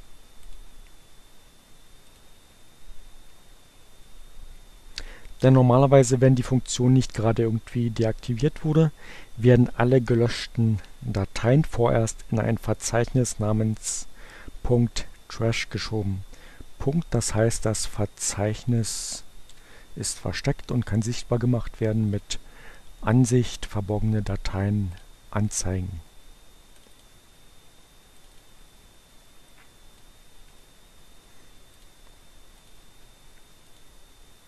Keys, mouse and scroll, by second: 0.3 click, 2.1 click, 17.6-18.9 drag, 18.9 Delete, 22.0 click, 23.9-25.3 drag, 26.2-27.5 drag, 28.1 click, 29.4-30.4 drag, 30.5 right click, 31.6 click, 32.5 click, 33.6 click.